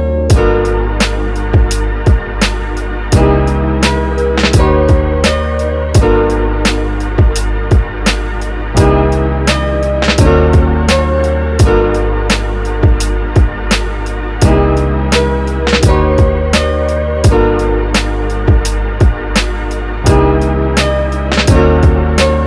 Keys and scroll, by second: 5.1 super+z, 9.1 super+z, 14.1 z, 14.7 x, 16.1 super+z, 16.2 space, 18.2 super+z.